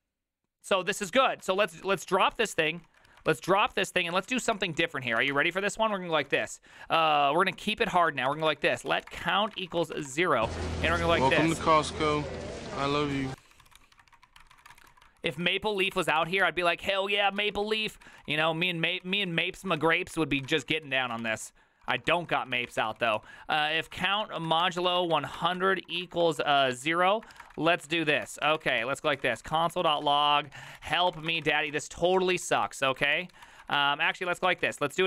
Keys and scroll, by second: 1.7 ctrl+c, 1.8 ctrl+c, 1.9 ctrl+c, 2.2 ctrl+a, 2.4 ctrl+a, 2.9 ctrl+a, 3.1 ctrl+a, 3.3 ctrl+c, 3.4 ctrl+c, 3.5 ctrl+c, 3.6 ctrl+c, 3.8 ctrl+a, 3.9-35.0 typing.